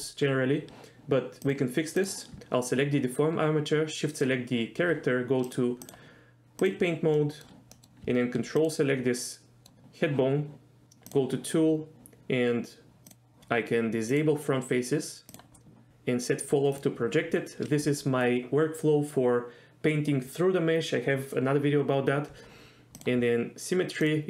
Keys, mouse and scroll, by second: 1.6-2.0 drag, 4.1 shift+click, 5.4 click, 5.8 click, 7.2 middle click, 7.8 middle click, 8.7 ctrl+click, 9.2 middle click, 11.1 click, 13.1 click, 14.1 click, 15.3 click, 16.7 click, 23.0 click, 24.0 click.